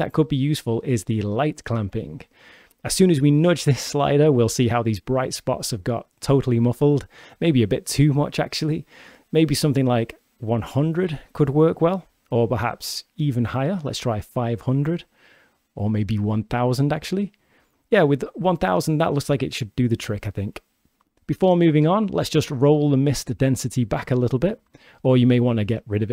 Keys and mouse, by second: 1.0 click, 2.4-6.4 drag, 6.5-8.5 drag, 7.9 0, 11.3-13.1 drag, 13.9-15.8 drag, 15.2 0, 16.1-17.4 drag, 16.9 0, 18.8-19.3 shift+drag, 22.3-23.8 drag, 24.3 click, 24.7 click.